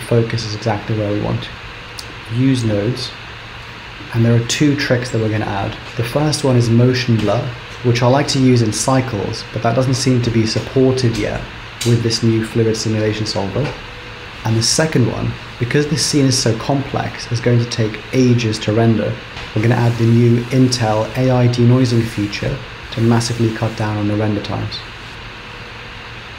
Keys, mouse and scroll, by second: 1.8 click, 2.9-3.8 scroll up 6, 3.8 middle click.